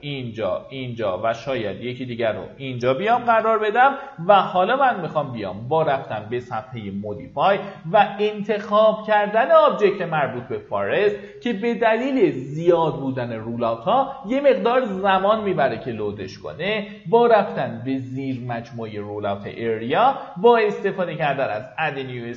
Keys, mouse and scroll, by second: 2.1 right click, 2.6 middle click, 3.3 typing, 4.1 middle click, 4.2 scroll down 1, 5.7-22.3 drag.